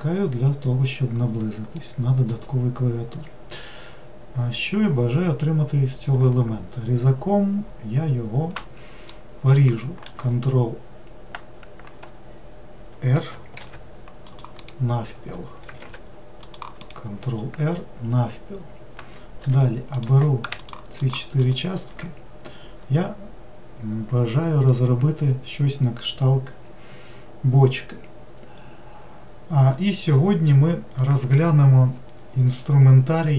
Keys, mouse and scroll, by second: 0.3-1.2 scroll down 1, 1.8-4.9 middle drag, 9.1 middle click, 10.0 ctrl+1, 13.6 ctrl+r, 15.8 ctrl+r, 19.4 3, 20.0 click, 20.6 shift+click, 21.0 shift+click, 21.4 shift+click.